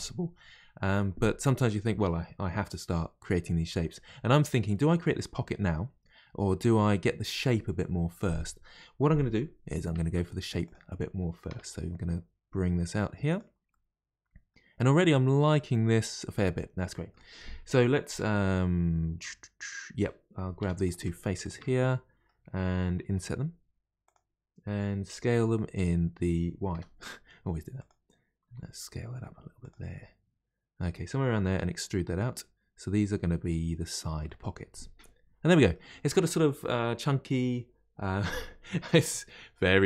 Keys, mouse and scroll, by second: 10.0 ctrl+r, 11.5 s, 13.7-16.9 middle drag, 20.6 3, 20.8 click, 21.4 shift+click, 21.8-23.1 middle drag, 23.1 i, 28.4 s, 29.9-31.5 middle drag, 31.5 e, 34.2-37.3 middle drag.